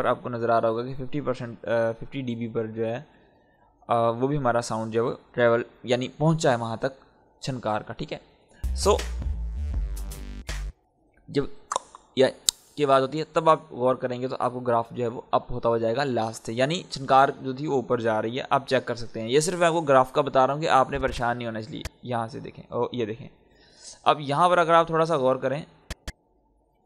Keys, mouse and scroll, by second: 8.1 scroll down 1, 10.4 space, 19.0-22.2 drag, 22.2-22.5 scroll up 1, 25.3-26.8 drag.